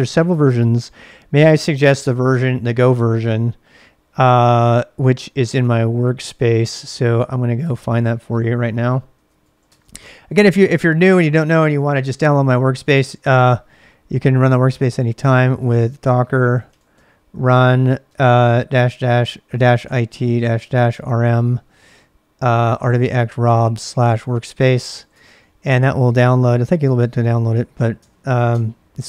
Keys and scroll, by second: 2.0 ctrl+[, 2.1-3.3 typing, 6.3 ctrl+[, 6.4 k, 6.6 Return, 7.1 ctrl+a, 7.6-10.9 typing, 12.7-25.6 typing, 26.7-27.4 typing, 27.9 Return, 28.5 Return.